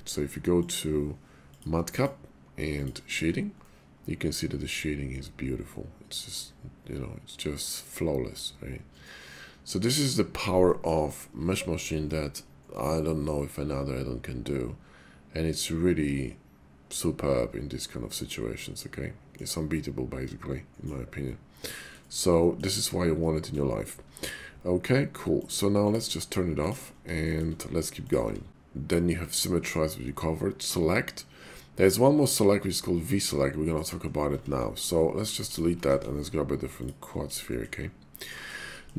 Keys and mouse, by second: 0.6-3.2 drag, 3.7-9.9 middle drag, 10.6 shift+middle drag, 11.5-11.8 shift+middle drag, 12.0-19.4 middle drag, 20.3-20.9 middle drag, 21.5-22.0 middle drag, 22.4 shift+middle drag, 25.4-26.9 drag, 27.3 shift+middle click, 27.9 click, 28.3 Tab, 34.4 Tab, 35.3 x, 35.8 shift+a, 37.4 shift+click, 38.2 click, 38.7 shift+click.